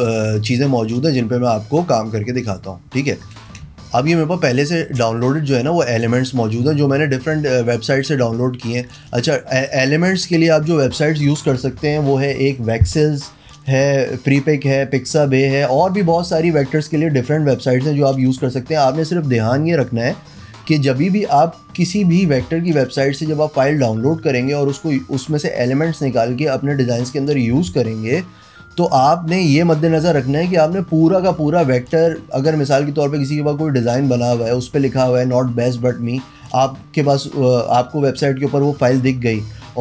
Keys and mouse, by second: 2.5 click, 3.2 drag, 3.7 space, 3.9 click, 5.9 click, 6.5-7.4 drag, 8.4-8.9 drag, 9.6 click.